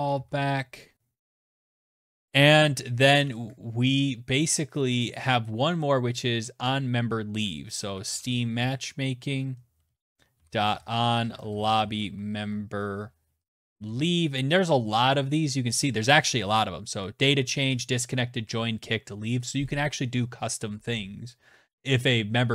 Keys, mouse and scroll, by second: 0.8 Return, 6.6-12.6 typing, 8.9 Return, 12.7 Down, 12.8 Down, 13.0 Down, 16.2 Up, 16.4 Up, 16.4 Down, 16.7 Down, 17.2 Down.